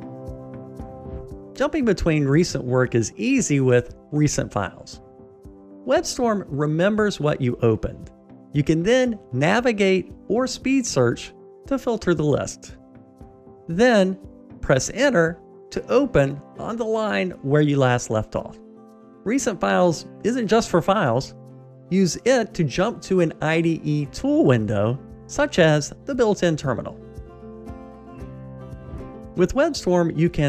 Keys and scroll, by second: 3.8 super+e, 21.2 super+e.